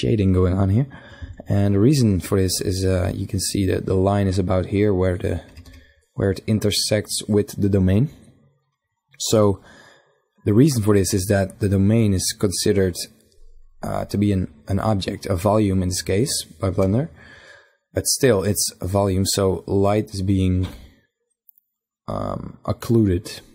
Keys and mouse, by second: 0.0 Escape, 4.0 KP_1, 4.5 KP_5, 14.9 KP_5.